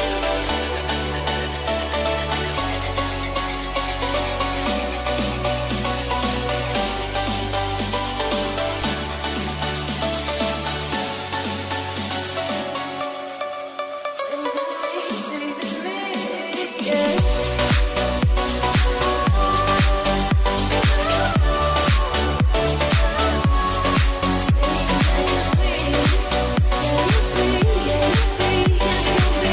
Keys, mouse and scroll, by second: 1.1 shift+middle click, 2.0 scroll up 1, 2.3-9.7 drag, 10.1 0, 10.6 Return, 11.1-17.8 drag, 17.8-19.0 middle drag, 19.0-23.8 drag, 24.3 0, 24.7 Return, 25.3 click, 25.6 middle click, 26.2 right click, 26.5 click, 26.7 scroll up 1, 27.2 middle click, 27.8-28.8 scroll down 1, 28.8 click.